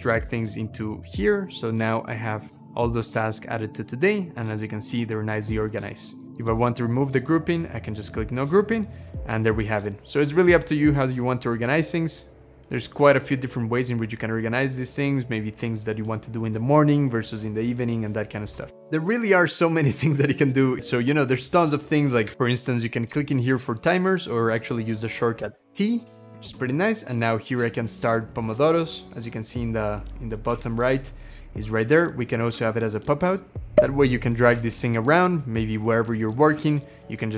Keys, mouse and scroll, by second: 2.4 x, 2.7 scroll down 3, 3.2-3.7 scroll up 4, 3.7-4.2 scroll down 3, 4.4-4.7 scroll down 2, 4.8-6.2 scroll up 4, 6.2 scroll up 1, 8.4-8.9 scroll down 2, 8.9-9.2 scroll up 2, 9.8-10.2 scroll down 1, 10.5-11.2 scroll up 1, 13.5-15.2 scroll down 5, 25.3 t, 33.8 shift+click, 34.2 shift+click, 34.7 shift+click, 35.0 shift+click, 35.3 shift+click.